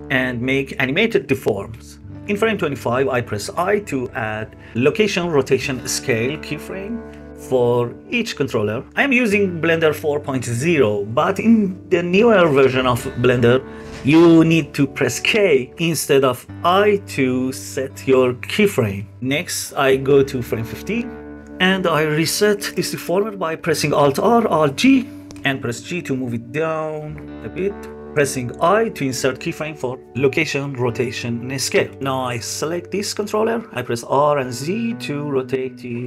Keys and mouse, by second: 2.8 i, 7.2 click, 7.7 i, 8.4 i, 19.3-21.2 drag, 22.2 click, 23.8 alt+r, 24.2 alt+g, 28.8 i, 31.8 click, 33.2 r, 33.9 z.